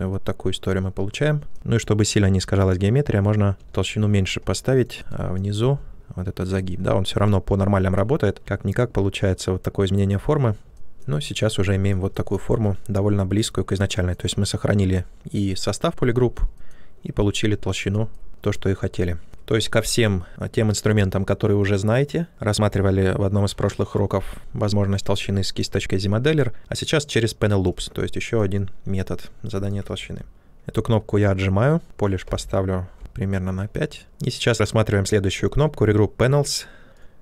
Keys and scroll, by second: 2.8-4.1 typing, 29.8 ctrl+z, 32.9 5.